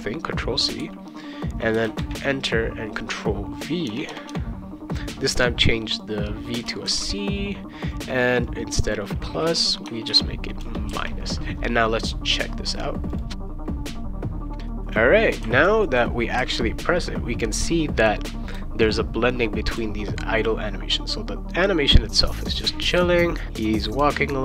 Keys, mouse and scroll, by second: 1.8 Return, 2.0 ctrl+v, 3.5 click, 3.8 BackSpace, 4.1 BackSpace, 6.0 click, 6.8 shift+c, 7.9 click, 8.5 click, 9.8 BackSpace, 10.0 -, 10.9 ctrl+s, 13.1 click, 13.8 click, 14.6 v, 15.4 c, 18.5 v, 19.8 c, 22.9 v, 24.0-24.4 typing.